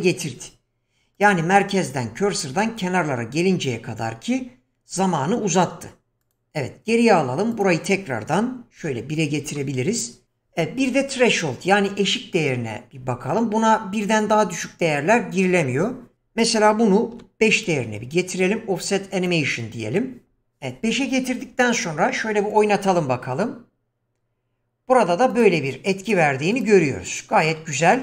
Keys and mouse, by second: 1.1 click, 6.2 click, 7.5-9.6 drag, 14.3 click, 16.1-17.7 drag, 19.1 click, 22.5 click, 25.3 click, 26.1 click, 26.6 click, 27.5-27.8 middle drag.